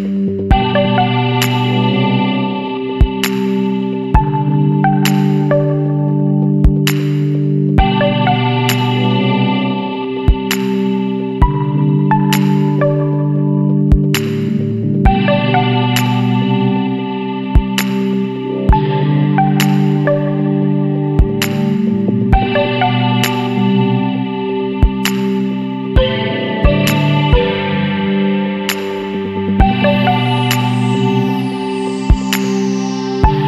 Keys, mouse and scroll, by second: 0.1 scroll down 1, 4.1 click, 6.7 click, 10.2 click, 10.9 scroll down 1, 11.4 scroll up 1, 12.3 scroll up 1, 14.5 click, 14.9 space, 17.3 click, 19.3 KP_4, 20.3 KP_Enter, 20.9 KP_5, 22.1 KP_Enter, 22.6 KP_0, 23.4 KP_Enter, 24.1 KP_6, 24.4 KP_2, 25.1 KP_Enter.